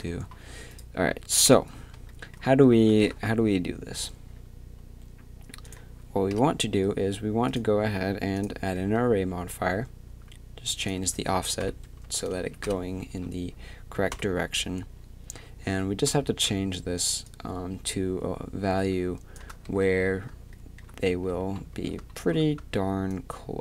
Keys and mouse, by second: 1.5 KP_3, 3.0 shift+c, 6.3 KP_3, 10.8-14.1 drag, 14.1 KP_7, 14.6 z, 15.7 z, 19.6 z, 21.1 z, 21.7 z.